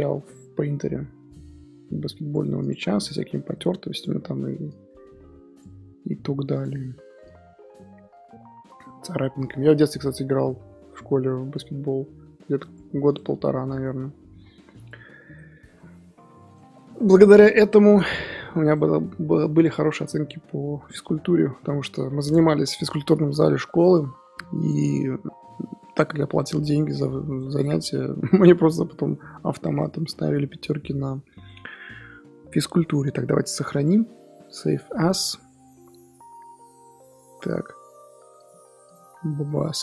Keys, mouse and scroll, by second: 3.0 click, 4.6 click, 6.8 click, 13.2 scroll down 1, 13.4-14.3 middle drag, 14.3 scroll up 3, 15.1 scroll down 3, 15.3-16.5 middle drag, 16.5 click, 18.6 click, 19.6 click, 24.6 click, 24.9-25.6 middle drag, 25.6 scroll up 2, 27.3 click, 27.7-28.6 middle drag, 28.6 g, 29.9-35.3 middle drag, 35.3-39.8 drag.